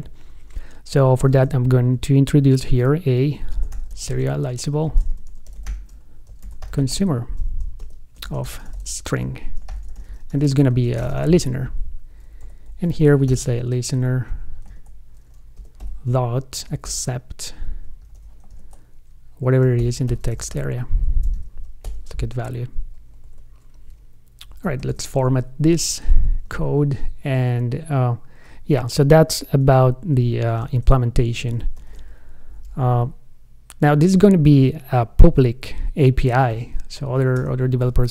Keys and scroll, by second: 7.2 ctrl+space, 15.0 ctrl+space, 18.8 ctrl+space, 25.1 shift+super+f, 26.8 super+Left, 30.8 shift+super+f, 32.0 shift+super+o.